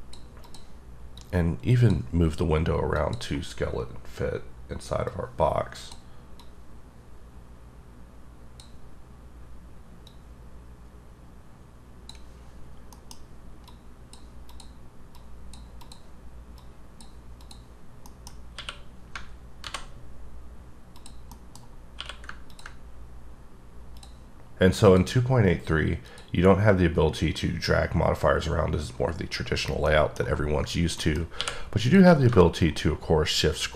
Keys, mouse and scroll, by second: 0.5 click, 1.2 click, 3.0 click, 5.1 click, 6.4 click, 10.1 click, 13.0 middle click, 13.2-13.5 scroll up 3, 13.7 click, 14.5 click, 15.2 click, 15.9 click, 16.6 click, 17.4 click, 17.8 scroll down 6, 17.9 scroll up 2, 18.2 middle click, 18.6 q, 19.7 alt+v, 21.0 click, 21.4 middle click, 21.8 scroll up 2, 22.0 q, 22.5 ctrl+click, 23.4-24.0 scroll up 4, 24.0 click, 24.9 click, 26.1 click, 29.9 middle click, 31.0 middle click, 31.4 q, 31.9 click, 32.5-33.1 shift+scroll up 6, 33.1-33.5 shift+scroll down 6.